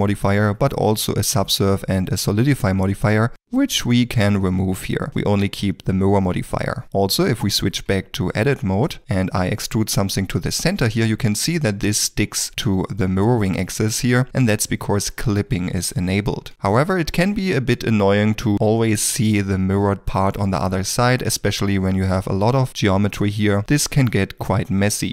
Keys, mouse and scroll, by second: 0.4 middle click, 6.8 ctrl+middle click, 7.1 Tab, 8.2 shift+middle click, 8.7 2, 9.2 middle click, 11.2 e, 11.2 middle click, 12.4 g, 16.2 g, 16.8 middle click.